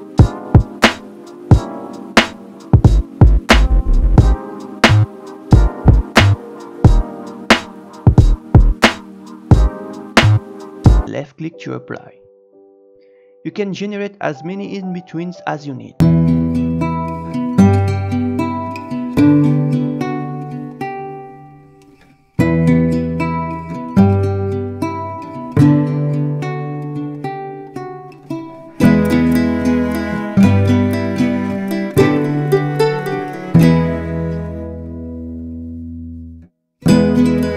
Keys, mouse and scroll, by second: 2.4 click, 14.0-16.9 drag, 20.3-21.3 drag, 24.8-29.1 drag, 31.5-34.5 drag, 36.8-37.5 drag.